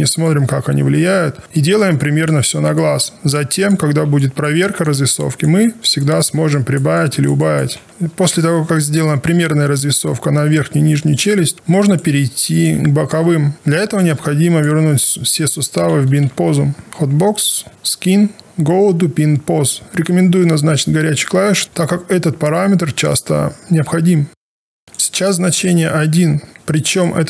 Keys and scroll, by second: 7.8 w, 16.2 ctrl+alt+r, 16.9 space.